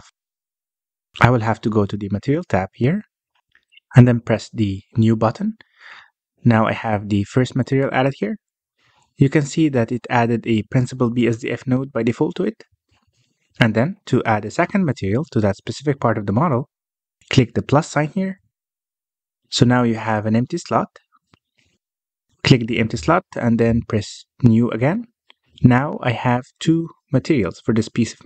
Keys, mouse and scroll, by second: 0.1 click, 1.1-2.5 middle drag, 2.5 click, 4.4 click, 6.2-9.2 drag, 13.0-13.4 scroll down 3, 13.4-15.9 scroll up 2, 15.9 KP_Decimal, 20.3-21.6 drag, 22.0 click, 25.6-28.2 drag.